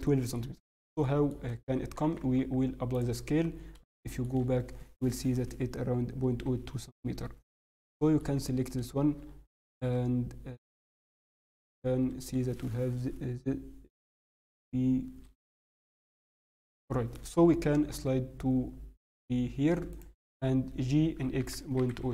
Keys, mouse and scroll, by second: 0.0 shift+middle click, 0.4 scroll, 1.0 shift+middle click, 1.7 Tab, 3.2 Tab, 3.5 scroll, 3.9 shift+middle click, 4.3 scroll, 5.1-5.5 scroll, 6.6 scroll up 3, 7.9 shift+middle click, 11.6 shift+middle click, 13.7 shift+click, 14.0 scroll down 3, 14.8 scroll up 1, 14.9 scroll, 15.4 scroll up 2, 15.6 scroll down 1, 15.8 scroll down 2, 16.3 alt+click, 16.6 scroll down 2, 16.9 shift+middle click, 17.7 g, 21.1 g.